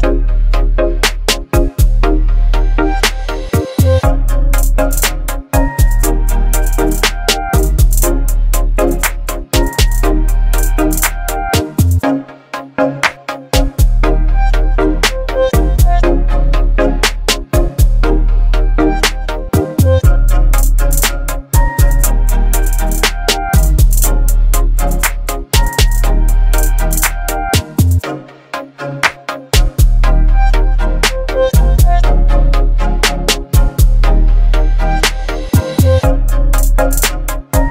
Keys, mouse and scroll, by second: 0.2 right click, 1.7 click, 3.3-5.1 shift+drag, 7.4 BackSpace, 9.4 click, 13.0 right click, 14.0-18.8 drag, 23.1-25.2 drag, 25.7-26.5 alt+scroll up 2, 26.8-27.1 click, 27.0 space, 27.8 ctrl+t, 32.2 Return, 33.8 ctrl+click, 35.2 click.